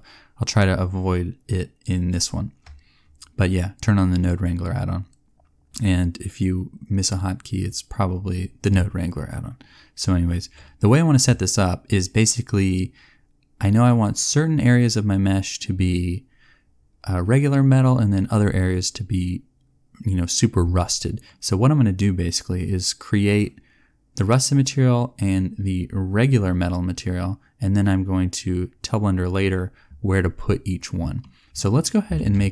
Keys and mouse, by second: 32.1 shift+a.